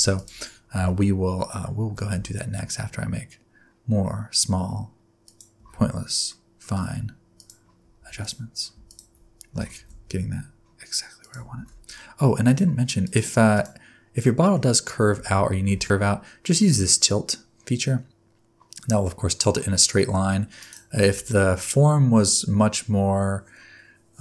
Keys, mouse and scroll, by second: 0.1 click, 0.7 Tab, 1.9 a, 2.1 s, 5.5 Tab, 6.2 middle click, 7.3 shift+click, 8.1 click, 8.8 shift+click, 9.5 g, 11.5 alt+a, 12.4 click, 13.0 click, 13.5 click, 14.2 middle click, 15.1 Tab, 15.7 a, 16.7 click, 21.1 Tab.